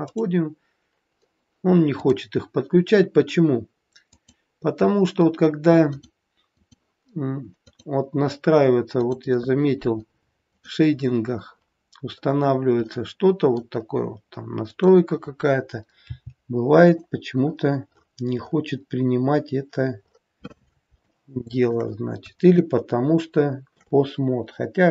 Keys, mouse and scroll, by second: 2.0 click, 4.0 click, 7.5 click, 8.9 click.